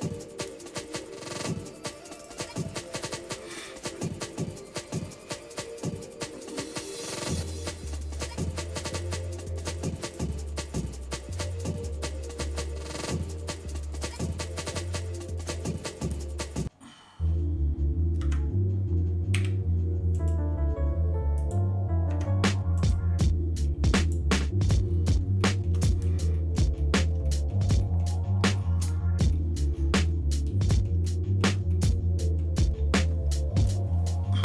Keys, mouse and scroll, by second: 2.3 click, 2.9 shift+middle click, 4.1 middle click, 4.7 shift+middle click, 5.3 middle click, 6.3-6.6 scroll up 2, 6.7 middle click, 7.9 middle click, 8.5-9.3 scroll up 4, 10.0 click, 14.3 click, 18.3 Tab, 19.3 a, 20.2-21.8 right drag, 22.1 Tab, 22.8-24.2 right drag, 24.8 scroll down 2, 25.4 shift+middle click, 25.9 middle click, 26.4 middle click, 26.8 middle click, 27.3 shift+middle click, 27.8 middle click, 28.6 shift+middle click, 29.4 middle click, 30.1 middle click, 31.0 shift+middle click, 31.7 middle click.